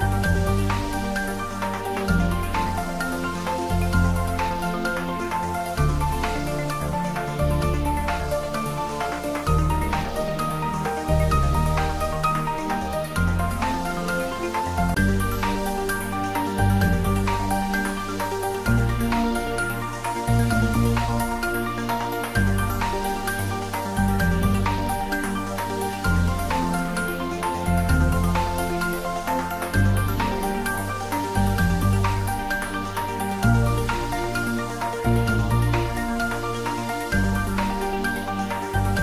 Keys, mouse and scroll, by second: 5.3 typing, 10.3-18.7 drag, 18.7 click, 25.8 click, 30.6 click, 34.4 click, 37.5 click.